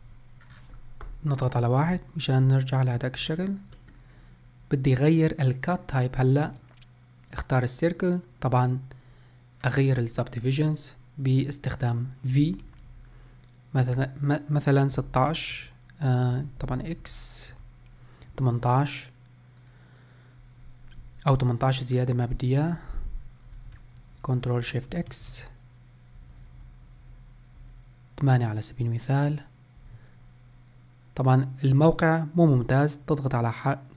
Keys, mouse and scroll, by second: 1.0 KP_1, 3.0 scroll up 2, 3.3-6.8 shift+middle drag, 24.8 ctrl+shift+x.